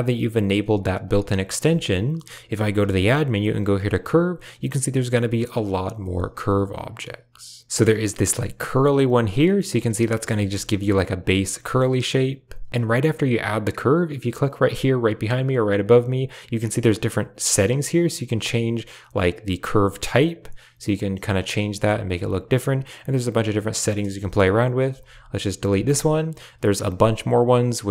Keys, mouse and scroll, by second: 1.6-2.8 typing, 9.3 click, 9.9 Tab, 10.0 click, 10.3 shift+click, 10.6 Tab, 11.4 Tab, 11.6 click, 12.5 x, 12.7 click, 15.8 click, 17.9-22.0 drag, 24.1 Tab, 24.8 x, 25.6 shift+a.